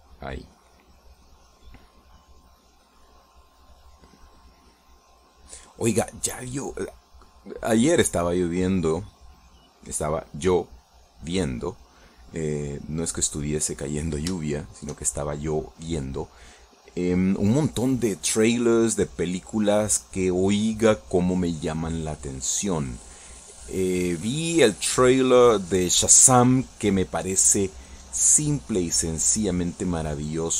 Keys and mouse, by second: 3.0 middle click, 3.7-8.5 drag, 8.6 middle click, 9.3 middle click, 10.1 middle click, 12.8-14.5 drag, 14.5 middle click, 15.6 shift+middle click, 18.6-22.3 drag, 22.9-29.3 drag, 29.4 middle click, 30.2-30.5 drag.